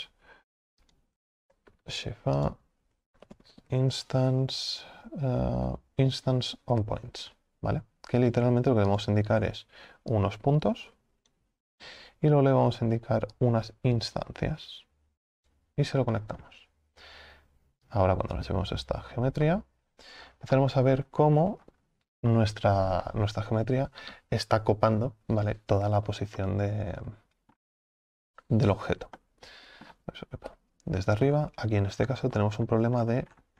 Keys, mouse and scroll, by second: 11.3 click, 20.1-20.6 scroll down 6, 20.6-21.4 middle drag, 21.4-21.8 scroll up 4, 21.8-22.3 scroll down 2, 22.3-23.3 middle drag, 23.3-26.4 scroll up 2, 26.4-27.9 middle drag, 27.9-28.3 scroll down 5, 28.3-29.2 scroll up 3, 29.2 alt+middle click, 30.5 KP_7, 31.3 scroll up 4.